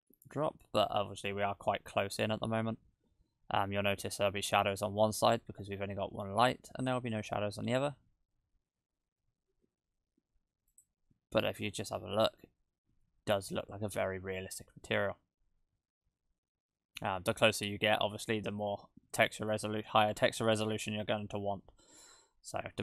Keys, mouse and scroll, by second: 13.1 shift+middle click, 14.0 shift+`.